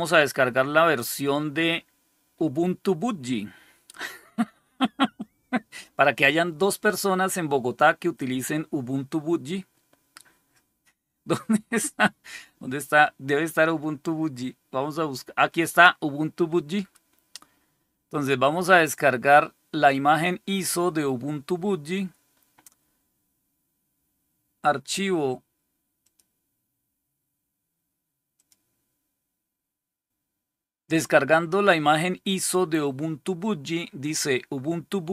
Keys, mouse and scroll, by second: 18.3 click, 26.0 click, 28.3 click.